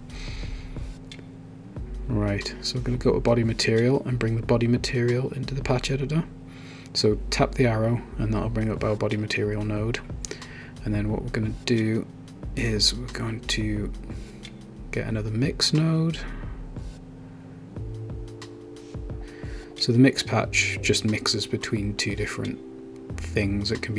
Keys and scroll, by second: 15.7-16.5 typing.